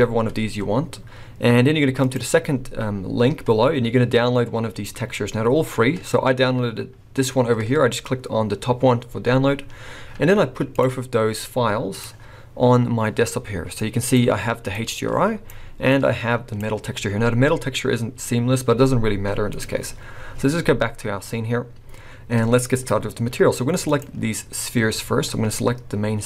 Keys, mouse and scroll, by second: 23.8 click, 24.7-26.2 scroll up 1.